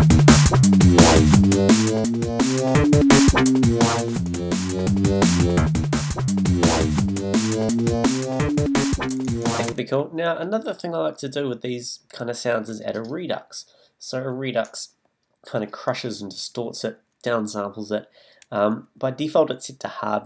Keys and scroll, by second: 9.7 space.